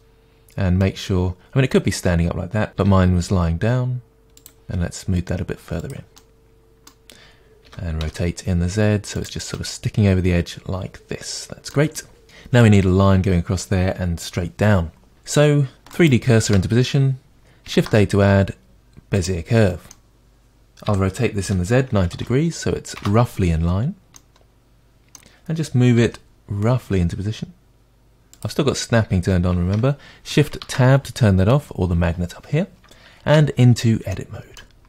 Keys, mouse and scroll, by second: 0.0-2.8 middle drag, 2.8 r, 4.5 click, 4.6 g, 5.9 click, 6.2-9.3 middle drag, 7.7 r, 9.3 drag, 9.5-16.0 middle drag, 16.0 shift+right click, 19.2 shift+a, 19.9-20.7 middle drag, 20.9 r, 23.1 Return, 24.3-28.4 middle drag, 26.0 g, 28.4-30.4 drag, 30.4 shift+Tab, 33.3 Tab, 34.1 middle click.